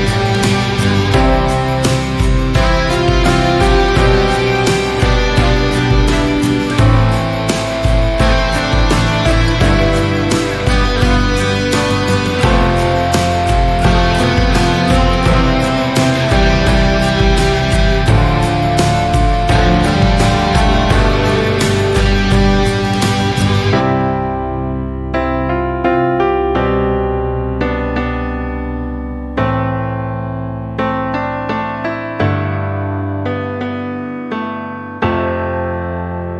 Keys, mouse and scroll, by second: 1.2 middle click, 2.0 KP_7, 2.5 scroll down 1, 2.8 shift+middle click, 3.6 click, 4.9 shift+middle click, 5.4 KP_3, 6.9 g, 13.3 shift+middle click, 13.8 click, 14.0 click, 15.1 g, 16.3 click, 16.7 g, 17.9 alt+z, 18.1-19.2 middle drag, 19.2-19.6 scroll up 1, 19.6 shift+middle click, 20.3 alt+z, 20.7 click, 21.3 alt+z, 21.8 click, 23.3 shift+middle click, 23.5 scroll up 1, 23.7 alt+z, 24.1 click, 24.4 alt+z, 25.1 click, 26.8 alt+z, 27.1 click, 27.8 alt+z, 28.0-29.4 middle drag, 29.4 click, 31.0 Tab, 31.3 scroll down 2, 31.4-31.9 middle drag, 31.9 drag, 32.2-33.9 middle drag, 33.9-34.4 scroll up 2, 34.4 Tab, 35.2 alt+z, 35.4 click, 35.8 alt+z, 36.2 click.